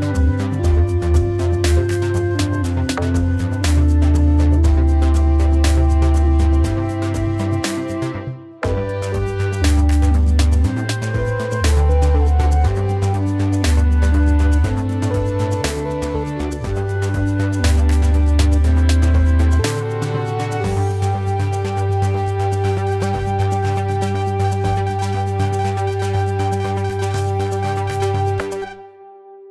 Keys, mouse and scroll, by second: 0.2 shift+click, 1.1 shift+click, 2.2 shift+click, 3.7 right click, 6.6 right click, 12.5 Left, 17.5 Delete, 18.8 ctrl+0.